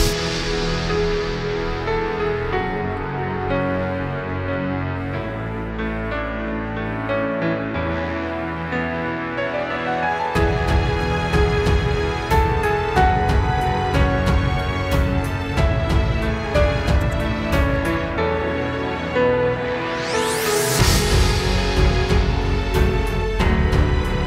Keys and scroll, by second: 0.0 space, 1.3 space, 1.9 super+space, 2.2 super+space, 2.8 alt+super+space, 4.3 space, 10.0 super+g, 11.3 super+[, 12.2 super+], 14.8 space, 15.6 super+space, 22.3 super+g.